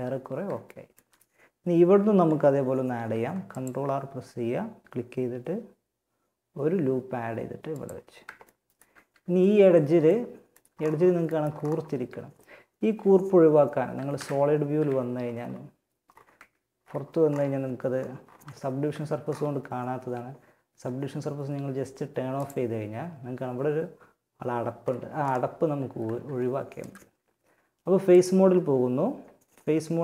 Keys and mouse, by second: 2.3 ctrl+r, 8.5 a, 13.4 z, 13.9 z, 15.5 Tab, 16.8 Tab, 17.7 Tab, 18.1 Tab, 21.7-23.6 drag, 25.3 ctrl+Tab.